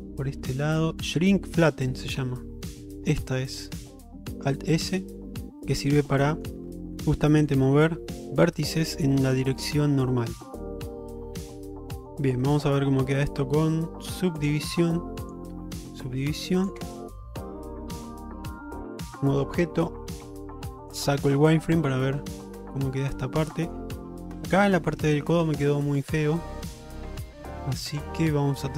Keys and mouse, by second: 5.6 middle click, 6.4 shift+middle click, 7.0 middle click, 8.2-10.7 middle drag, 11.1 shift+middle click, 11.7 middle click, 15.4 click, 16.1 middle click, 17.0 Tab, 18.0 ctrl+Tab, 20.3 q, 21.6-23.8 middle drag, 24.5 click, 25.0 Tab, 25.4-28.7 middle drag.